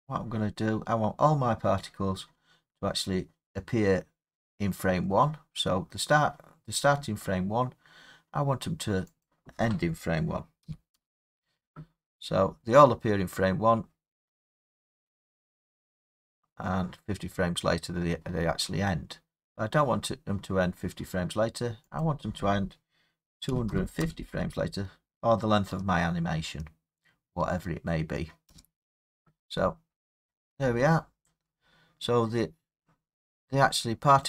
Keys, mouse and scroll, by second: 0.1 scroll down 6, 0.9 scroll up 3, 2.6-5.2 scroll up 1, 7.7 middle drag, 9.2-14.3 drag, 10.6 typing, 11.0 Return, 22.0 click, 23.4-24.0 typing, 28.4 Return, 33.2 middle click, 33.3-34.2 scroll.